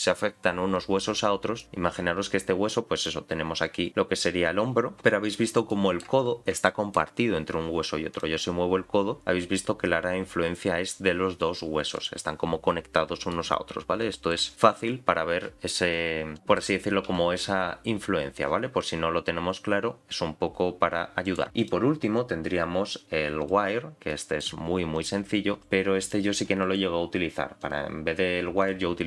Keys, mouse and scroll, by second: 1.1-1.6 scroll down 1, 1.6 middle click, 1.6 scroll down 2, 2.9 click, 3.5 g, 4.9 click, 5.7 middle click, 6.3-6.6 scroll up 2, 6.6 shift+middle click, 7.2-8.1 scroll up 1, 8.1 click, 8.6 g, 12.8-13.3 scroll down 1, 13.3 scroll down 4, 13.3-14.3 middle drag, 16.3 click, 16.4 middle click, 17.1 s, 21.6-23.5 drag, 24.1 middle click, 24.9 click, 25.4 g, 26.0 click, 26.3 g, 27.6-28.7 drag.